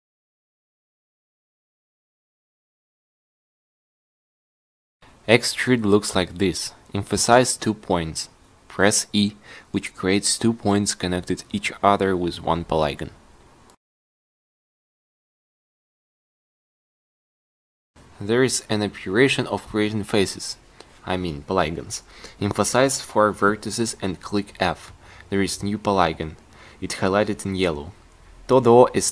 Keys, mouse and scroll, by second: 7.6 e, 14.8-15.9 drag, 15.0 e, 19.9 f, 26.0 ctrl+r, 27.4 g.